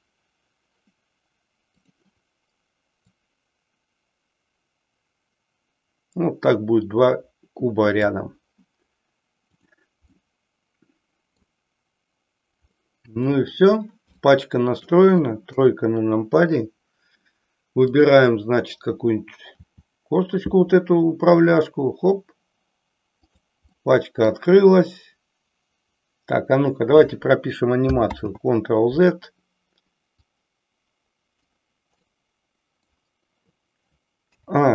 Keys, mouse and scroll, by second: 1.9 click, 3.0-8.1 drag, 9.3 click, 10.2-11.3 middle drag, 12.6-13.6 middle drag, 14.2-15.0 shift+middle drag, 15.5 KP_3, 17.9 click, 19.6 r, 23.4 click, 23.7-24.4 middle drag, 28.1 ctrl+z, 30.2-31.4 drag, 32.1 middle click, 34.2 a.